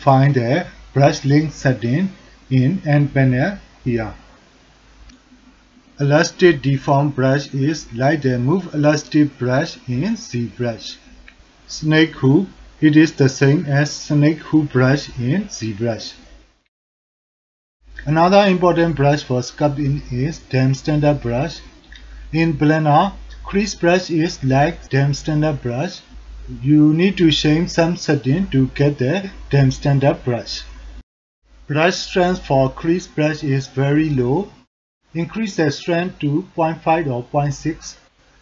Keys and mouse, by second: 3.9-5.1 drag, 6.4 click, 8.6 f, 9.5-11.1 drag, 11.3 f, 11.5 f, 12.2 click, 13.9 shift+click, 20.5-23.5 middle drag, 24.2-25.4 drag, 25.4 f, 26.6 ctrl+alt+middle drag, 29.1-29.6 drag, 29.8-31.0 drag, 31.0 alt+middle click, 34.7-37.8 drag.